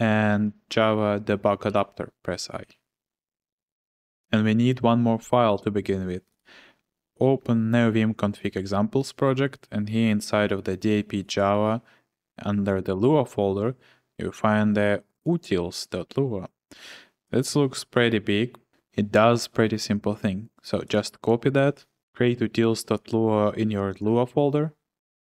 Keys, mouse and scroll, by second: 0.0-1.7 typing, 6.4 click, 13.0 click, 15.2 click, 18.7 ctrl+c, 21.1 click, 21.6 click, 22.0 typing, 24.0 Return, 24.7-25.3 typing.